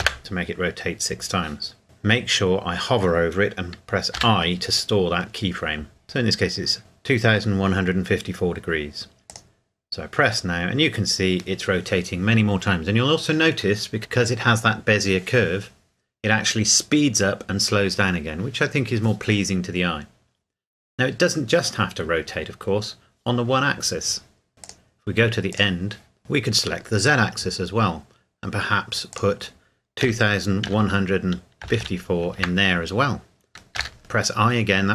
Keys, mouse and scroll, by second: 0.1 KP_Enter, 9.3 click, 24.5 click, 29.1 click, 30.0 KP_2, 30.7 KP_1, 31.6 KP_5, 31.8 KP_4, 32.4 KP_Enter.